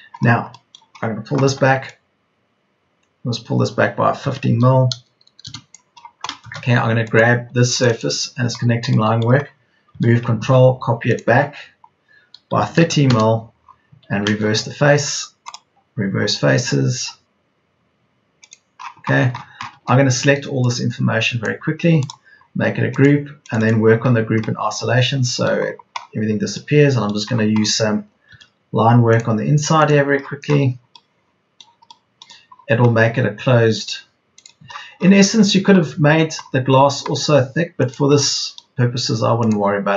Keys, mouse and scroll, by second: 4.1 KP_1, 5.0 KP_5, 7.0 space, 8.0 space, 9.8 m, 12.5 KP_3, 12.7 KP_0, 13.8 Escape, 19.6 Escape, 23.0 Escape, 28.0 Escape, 29.8 Escape, 33.0 Escape.